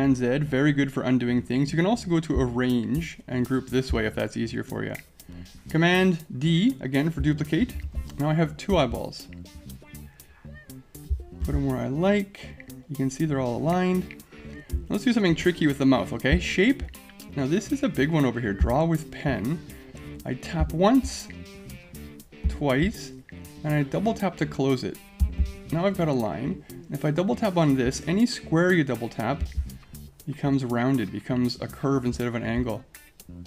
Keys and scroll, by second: 7.6 super+d.